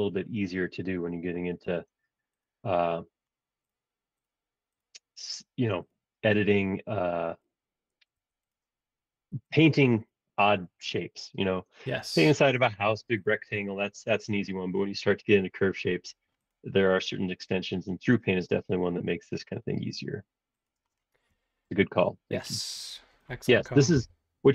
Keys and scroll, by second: 8.1 Escape, 15.9 super+z, 20.9 space, 24.0 l.